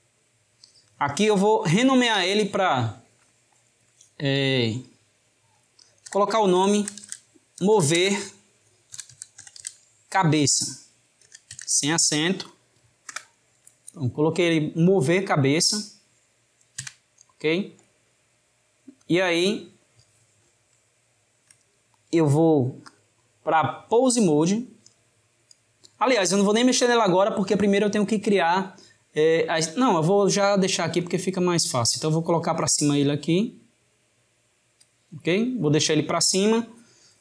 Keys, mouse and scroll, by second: 16.8 Tab, 19.0 click, 20.7-22.9 shift+middle drag, 22.9-26.0 drag, 31.0 drag.